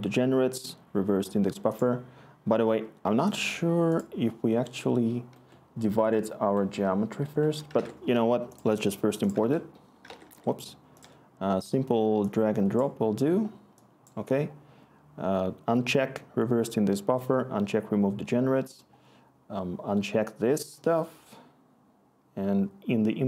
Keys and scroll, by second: 7.7 alt+Tab, 9.4 alt+Tab, 10.1 alt+Tab, 10.6 alt+Tab.